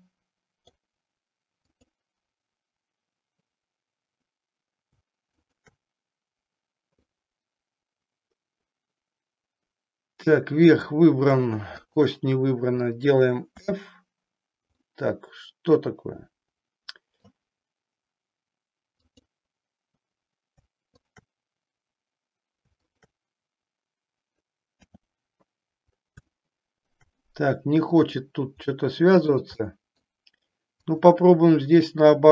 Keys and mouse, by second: 1.7 click, 5.3 shift+click, 7.1-10.8 middle drag, 11.8 shift+click, 13.4 f, 14.7-17.3 middle drag, 18.9 click, 22.8 shift+click, 24.8 f, 26.3 shift+middle click, 27.4 middle click, 28.7 middle click, 29.8 middle click, 30.7 click.